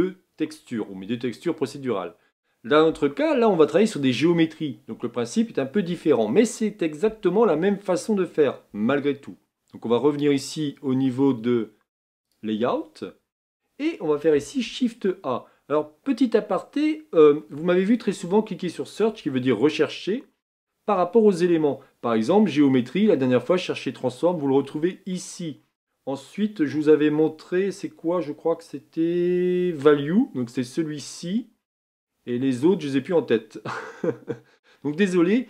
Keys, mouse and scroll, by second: 12.3 click.